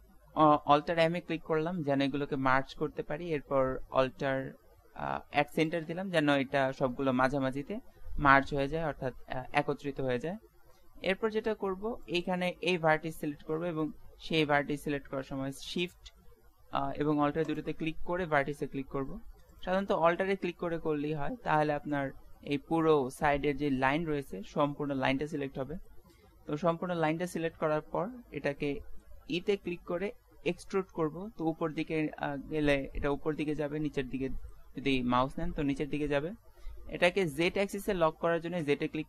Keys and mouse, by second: 0.4 alt+m, 8.3-13.7 middle drag, 13.7 right click, 17.5-19.4 right drag, 19.5-21.6 right drag, 21.6-24.4 middle drag, 25.9-30.0 middle drag, 30.0 e, 33.5 middle click, 34.3 middle click, 35.2 middle click.